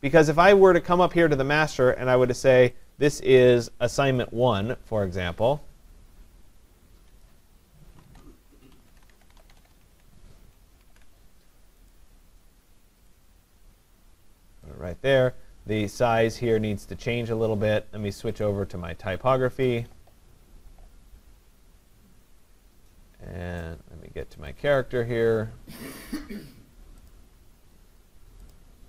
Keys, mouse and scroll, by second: 1.0 click, 1.3 click, 2.8 click, 7.3 click, 7.8-10.3 typing, 10.8 ctrl+a, 11.9 click, 14.7 click, 18.4 click, 19.7 click, 24.5 click, 27.1 click, 28.5 click.